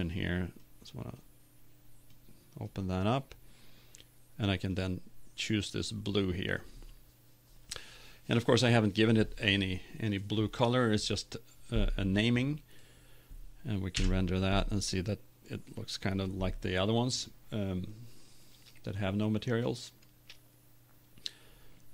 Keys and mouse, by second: 8.9 click, 14.4 F12.